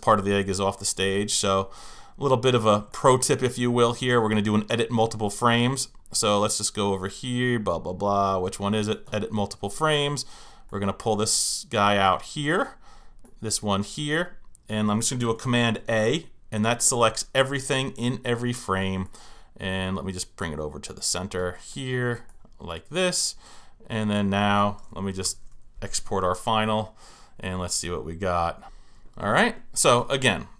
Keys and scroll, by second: 25.2 super+Return.